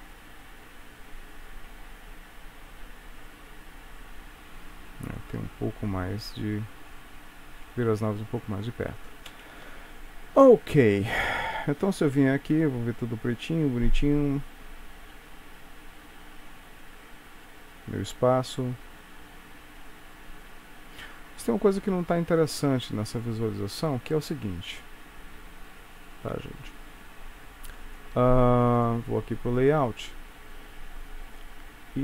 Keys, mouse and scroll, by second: 9.3 space, 10.5 ctrl+s, 11.8 click, 13.1 space, 24.0 Escape.